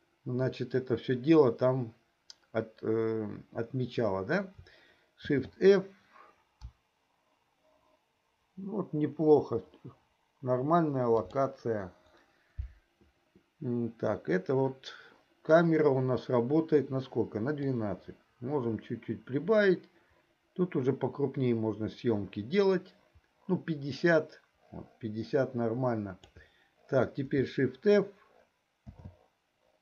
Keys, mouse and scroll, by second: 5.4 shift+f, 11.5 Right, 17.7-26.7 drag, 29.0 shift+f.